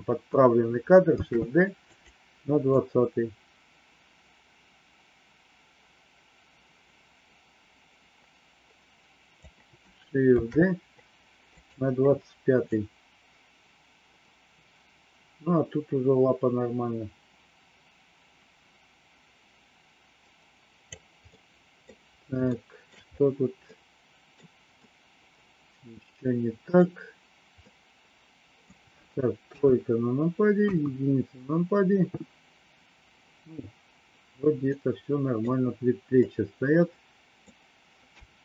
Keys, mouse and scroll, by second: 1.1 shift+d, 2.7-9.4 drag, 10.4 shift+d, 12.7-20.9 drag, 21.2 middle click, 22.4 shift+middle click, 23.6 middle click, 24.8-26.7 middle drag, 27.5-28.7 middle drag, 29.4 KP_3, 30.5 KP_1, 34.6 middle click, 36.2-37.5 middle drag, 38.1 KP_3.